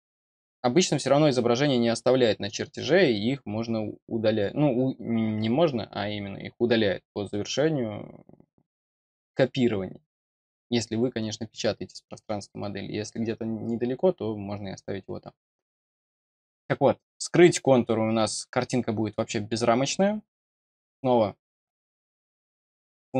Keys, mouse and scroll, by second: 17.3 click, 19.1 middle click, 22.2 click.